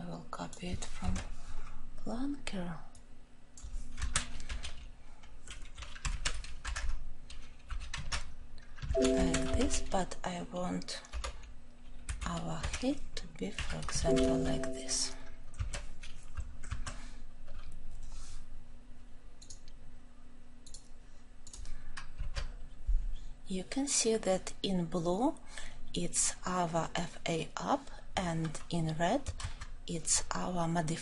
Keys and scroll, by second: 7.9 ctrl+v, 9.6 ctrl+;.